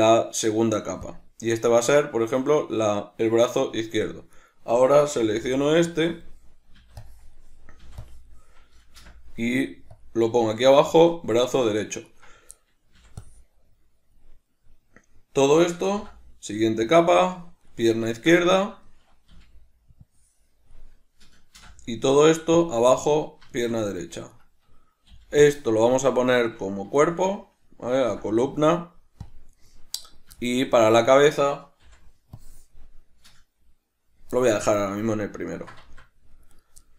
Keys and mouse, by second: 4.4 right click, 5.2 b, 12.1 right click, 12.5-15.7 middle drag, 12.9 b, 15.9 m, 17.7 middle click, 18.5-24.3 ctrl+middle drag, 19.3 b, 24.3 right click, 25.1 b, 26.3 shift+middle click, 27.0 shift+right click, 28.0 m, 30.0 right click, 30.4-36.5 shift+middle drag, 31.8 b, 36.5 right click, 36.8-36.9 ctrl+middle drag.